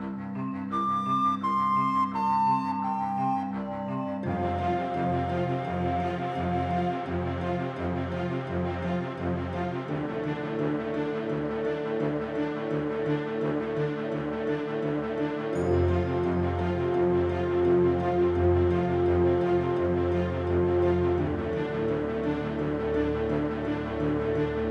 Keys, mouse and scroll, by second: 0.0 middle click, 0.2 click, 0.2 scroll up 1, 0.2 m, 1.0 click, 1.8 click, 2.4 click, 2.9 click, 3.1 l, 4.4 click, 4.7 r, 6.7 click, 7.9 click, 8.7 click, 9.4 click, 10.4 BackSpace, 12.4 click, 13.6 click, 15.5 click, 16.8 click, 19.7 click, 20.1 scroll down 4, 20.2 alt+a, 20.2-20.6 scroll up 4, 20.2 middle click, 20.3 shift+middle click, 20.7 click, 21.1 BackSpace, 21.4 BackSpace, 21.4 n, 23.1 click, 23.5 scroll down 12, 23.6 scroll up 4, 23.7 shift+middle click, 23.7 scroll down 1, 23.9 middle click, 23.9 scroll up 4, 24.1-24.4 scroll down 6, 24.1 middle click, 24.2 click, 24.4 middle click, 24.5 click, 24.6-24.7 scroll up 3.